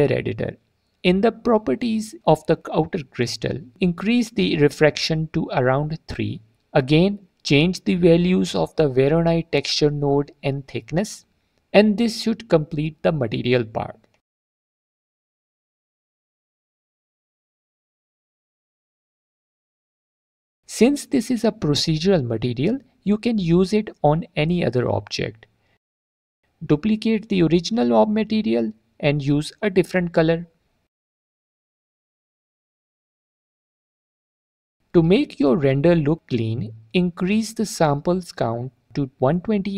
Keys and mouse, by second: 0.2 middle click, 1.3 middle click, 2.0 middle click, 3.1 shift+click, 3.4-5.2 shift+middle drag, 8.7-9.9 shift+drag, 10.3 click, 10.8 right click, 11.1 click, 11.1 right click, 11.9-15.1 drag, 16.0-17.7 shift+drag, 19.9 middle click, 21.4 click, 22.4 click, 23.2 drag, 23.2 right click, 23.3 middle click, 25.7 click, 25.9 click, 26.1 middle click, 26.7 shift+a, 27.8 click, 28.1 click, 29.1 click, 31.0 click, 33.9 alt+click, 34.1 drag, 35.3 click, 39.6-39.7 drag.